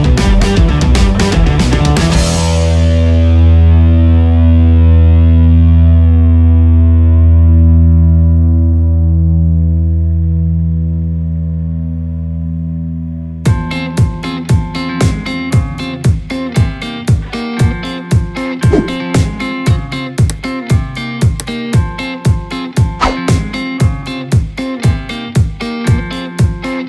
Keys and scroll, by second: 5.5 Return, 11.8 ctrl+KP_Subtract.